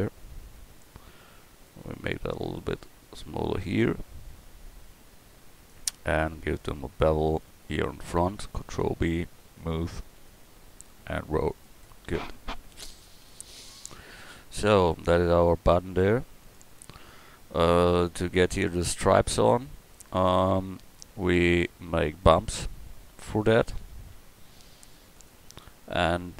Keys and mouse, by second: 8.8 ctrl+b, 13.8 Tab, 17.4-18.3 middle drag, 22.3-23.6 drag, 24.2 KP_1.